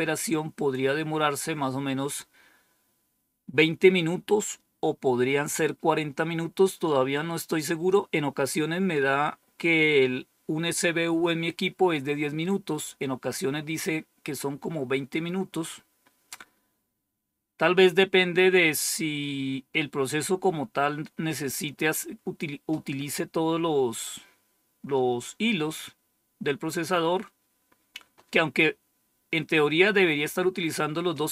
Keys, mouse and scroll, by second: 0.4 click.